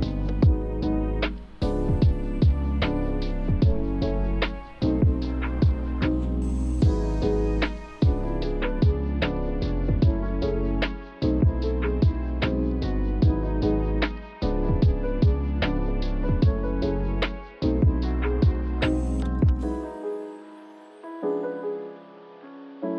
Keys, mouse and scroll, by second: 0.4 alt+middle click, 0.5 alt+scroll up 1, 0.6 alt+click, 1.2 shift+click, 2.2 shift+click, 2.8 scroll down 1, 2.8 alt+middle click, 3.2 shift+click, 3.8 alt+middle click, 4.1-5.4 shift+drag, 5.4 alt+middle click, 5.8 shift+click, 6.7 shift+click, 7.4 5, 7.5 Return, 7.7 click, 7.8 scroll down 1, 8.5 alt+middle click, 8.6-9.0 alt+scroll up 2, 8.7 alt+click, 9.0 alt+click, 9.3 alt+scroll down 1, 10.7-11.2 scroll down 1, 11.2 click, 11.9 scroll down 1, 12.2 click, 14.8 click, 16.6 1, 16.8 click, 17.0 1, 17.3 click, 17.5 1, 18.2 click, 19.9 f, 22.0 click.